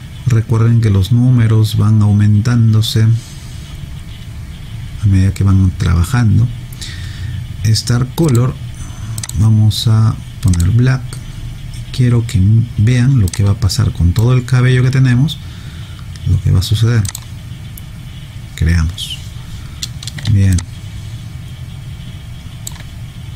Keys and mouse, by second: 8.3 click, 13.3 click, 17.1 click, 20.5 alt+click.